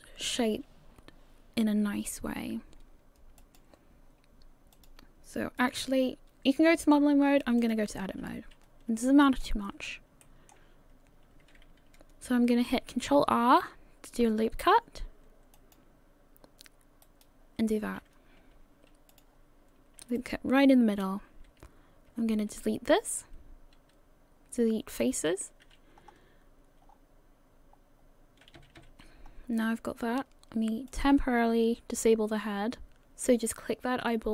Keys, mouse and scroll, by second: 4.8 click, 7.7 click, 8.6 scroll up 2, 9.3 shift+middle click, 9.3-10.2 scroll up 4, 10.2 shift+middle click, 13.2 ctrl+r, 19.1 click, 20.2 alt+right click, 22.1 x, 25.9-26.9 scroll up 3, 26.9-27.7 scroll down 3, 28.6 a, 28.8 a, 29.1 scroll down 2, 29.3-30.9 scroll up 1, 30.9 click.